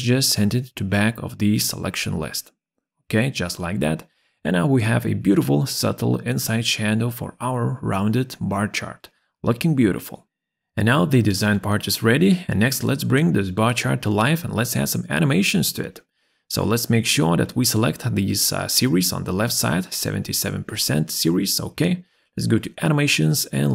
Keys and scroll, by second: 16.4 Escape.